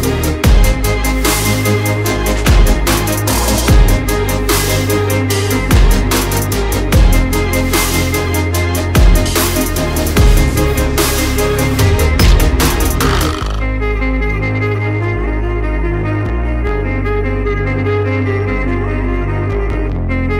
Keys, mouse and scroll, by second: 4.6 click, 5.0 shift+click, 5.6 right click, 6.1 click, 6.9 click, 7.1 alt+scroll up 1, 8.1-8.4 alt+scroll down 1, 10.5-10.9 alt+scroll down 1, 11.7 alt+scroll up 1, 12.1 alt+scroll down 1, 13.1 alt+scroll up 1, 14.1 click, 15.5 alt+scroll down 1, 16.5 click, 18.0 ctrl+z, 18.5 alt+click.